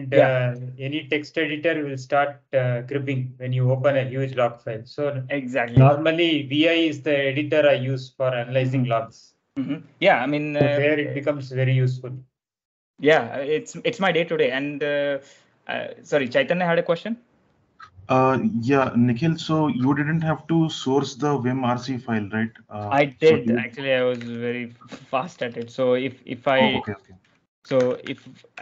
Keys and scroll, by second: 24.0 ctrl+j, 24.0 ctrl+l, 25.4 super+Tab, 26.0 ctrl+l, 26.0 super+Tab, 26.5-28.6 typing.